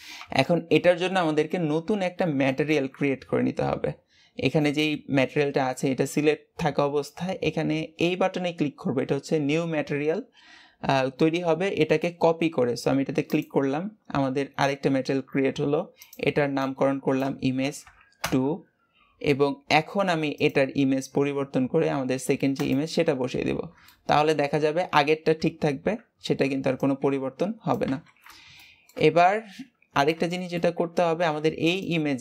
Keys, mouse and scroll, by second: 1.6-2.4 scroll up 4, 2.4-5.5 shift+middle drag, 13.2-19.0 drag, 20.3 click, 23.1 scroll down 3, 23.8-24.3 shift+middle drag, 24.3-25.4 scroll up 1, 28.5-29.0 shift+middle drag, 29.0-29.6 scroll up 4, 30.2-30.6 shift+middle drag, 30.6 scroll up 1.